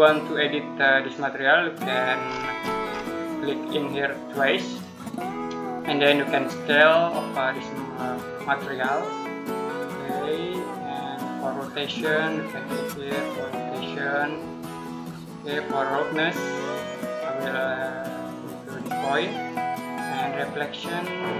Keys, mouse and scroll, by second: 1.0 click, 2.1 scroll up 1, 4.3 click.